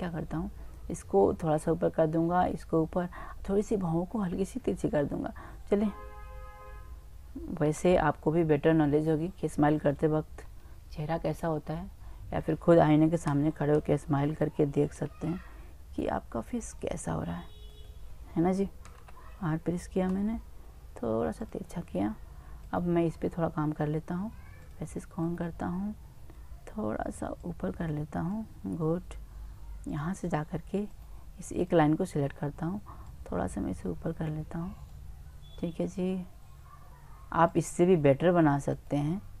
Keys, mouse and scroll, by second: 7.7 Tab, 8.9 right click, 11.0 middle click, 13.3 l, 13.4 l, 15.0 r, 16.9 click, 17.7 click, 18.2 right click, 18.5 middle click, 18.6 right click, 18.9 l, 19.0 l, 20.1 r, 22.7 click, 23.1 middle click, 25.2-26.2 middle drag, 27.4-29.2 right drag, 30.9 click, 30.9-34.9 right drag, 33.1 middle click, 33.1 click, 37.5-39.4 drag, 38.7-39.4 right drag.